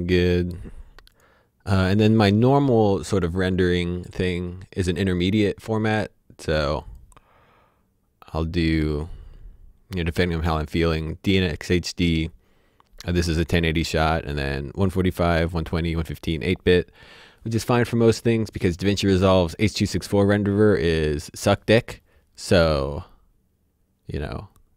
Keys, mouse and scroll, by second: 0.4-1.1 scroll up 1, 1.1 click, 6.8 click, 7.9-9.0 scroll down 1, 10.5 click, 23.2-24.7 scroll down 1.